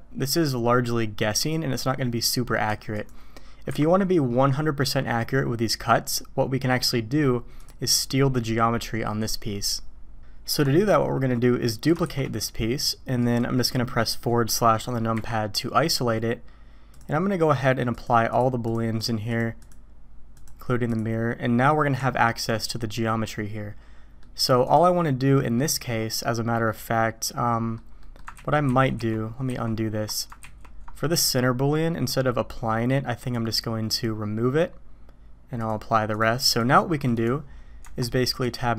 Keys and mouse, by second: 3.7 Delete, 10.6-11.3 drag, 12.0 shift+d, 16.9 click, 18.0-18.4 drag, 18.6-19.1 drag, 19.3 click, 20.3-21.0 drag, 22.0 Tab, 22.9-24.2 drag, 24.7 click, 25.5 middle click, 26.7-27.8 drag, 28.0 click, 28.3 ctrl+z, 28.7 ctrl+z, 29.0 ctrl+z, 29.5 ctrl+z, 30.4 ctrl+z, 33.3 click, 35.7-36.2 drag, 36.6 click, 37.8 Tab.